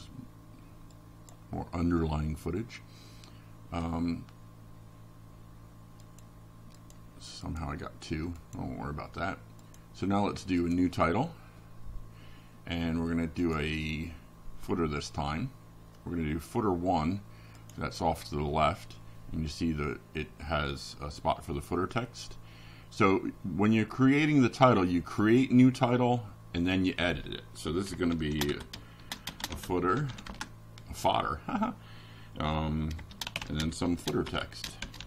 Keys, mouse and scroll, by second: 0.0 click, 6.9 click, 9.6-11.9 typing, 13.9-18.3 typing, 19.5 click, 24.3 click, 26.0-27.1 drag, 28.5 click, 29.3 click, 30.4 click, 31.6 click.